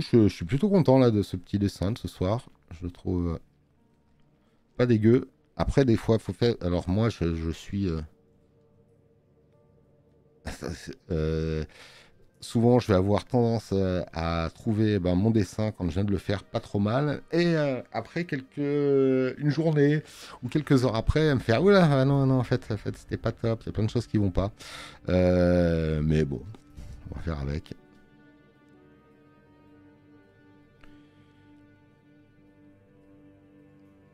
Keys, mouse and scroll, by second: 5.8 space, 6.0 click, 33.0 click, 33.0 space.